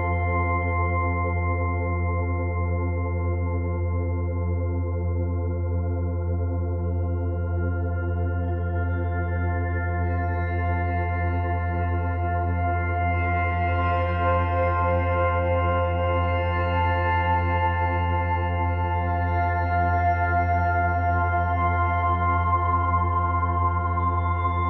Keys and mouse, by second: 1.4 click, 2.9 click, 4.1 click, 5.5 click, 7.5-9.1 drag, 9.4-11.4 middle drag, 11.4-13.0 drag, 13.4 click, 15.5 g, 15.9 z, 18.2 click, 19.4 g, 19.9 x, 21.7 click.